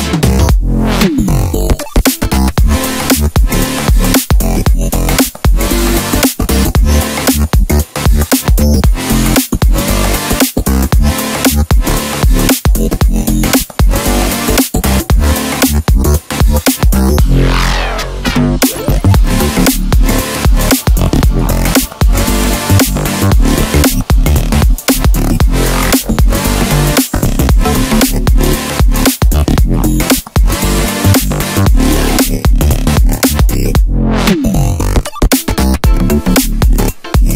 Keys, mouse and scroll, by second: 0.0-3.0 middle drag, 3.1 s, 4.7-6.2 middle drag, 6.2 click, 6.6-9.2 middle drag, 9.2 click, 9.7-10.7 middle drag, 10.7 e, 12.9-16.0 middle drag, 16.5-18.0 scroll down 1, 18.0 KP_7, 20.4 click, 22.2 click, 24.9 shift+click, 26.1-29.1 middle drag, 29.3 shift+click, 30.3-33.8 middle drag, 33.8 shift+click, 35.1 KP_1, 36.9 click.